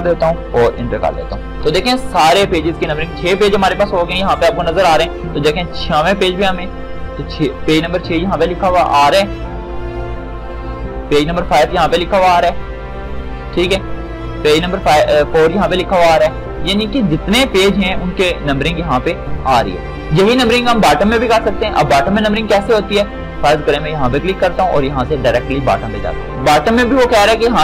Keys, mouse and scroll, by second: 0.0-0.6 typing, 1.3 Return, 5.7-9.0 drag, 10.4-14.0 drag, 14.2-22.9 drag.